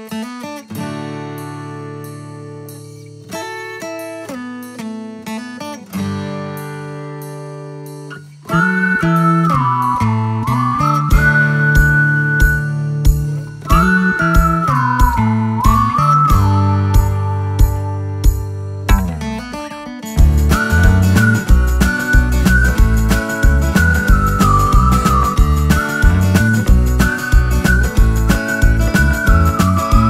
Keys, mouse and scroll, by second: 0.2-1.8 typing, 3.5-6.6 typing, 8.6-11.8 typing, 12.8-14.6 scroll up 1, 17.8 click, 25.9 click, 26.4 ctrl+click, 29.0 Left.